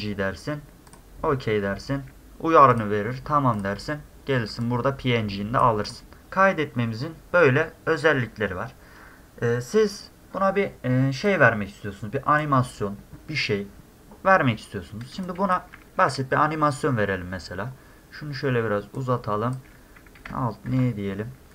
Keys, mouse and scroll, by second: 0.9 click, 2.7 click, 3.6 click, 4.7 click, 5.9 click, 11.3-12.4 drag, 14.4 middle click, 15.2 drag, 16.0 middle click, 19.0-19.5 drag.